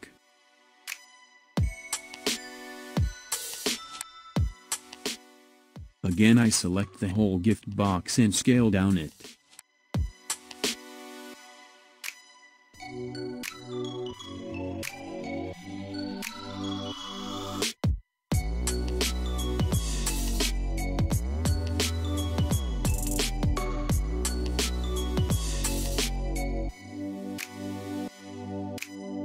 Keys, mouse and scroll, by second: 0.4 click, 1.7 click, 2.4 click, 4.6 click, 5.3 click, 6.8 click, 8.4-9.7 middle drag, 9.7 KP_1, 11.1-12.1 scroll up 1, 13.9 s, 21.7 s, 27.8 scroll up 4, 28.3 click.